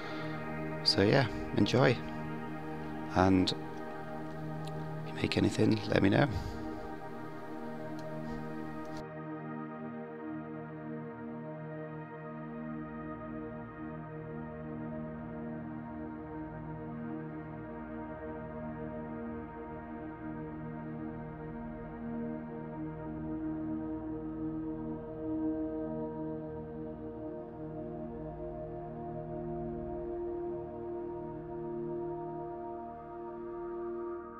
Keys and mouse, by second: 0.0 3, 0.0 click, 0.3 i, 1.0 click, 1.2 3, 1.6 alt+click, 1.9 middle click, 2.3 click, 2.8 click, 3.7 s, 4.8 Tab, 5.0 s, 5.9 Tab, 6.3-6.8 drag, 7.0 click, 7.8 Tab, 8.1 ctrl+a, 8.4 Tab, 8.6 click, 8.9 s, 9.5 click, 10.1 s, 11.0 middle click, 11.7 middle click, 11.9 click, 12.2 g, 12.5 click, 13.1 Tab, 13.3 g, 13.8-14.5 drag, 15.0 s, 15.3 g, 16.0-16.4 drag, 16.6 middle click, 17.0-17.6 middle drag, 17.8-18.2 middle drag, 18.3 shift+click, 18.5 middle drag, 19.1 Tab, 19.5 ctrl+r, 20.5 ctrl+b, 21.8-23.7 drag, 24.0 s, 26.0 3, 26.1 click, 26.3 g, 27.5 ctrl+r, 28.1 3, 28.3 alt+click, 28.6 click, 29.6 2, 30.3 ctrl+b, 31.7 Tab, 31.8 middle drag, 32.1 shift+middle click, 32.3 middle click, 32.4 KP_1, 32.7 g, 33.6 click, 34.0 ctrl+s.